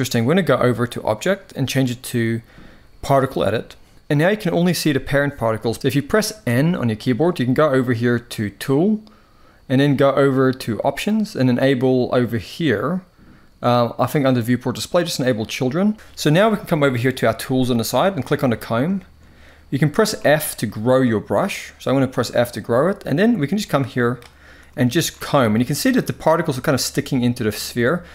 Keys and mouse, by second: 0.7-3.1 drag, 5.7 n, 6.1 n, 8.3 click, 10.4 click, 15.1 click, 17.9 click, 18.6 shift+middle click, 19.8 f, 23.0-23.8 drag, 24.5 shift+middle click, 25.1-25.9 drag.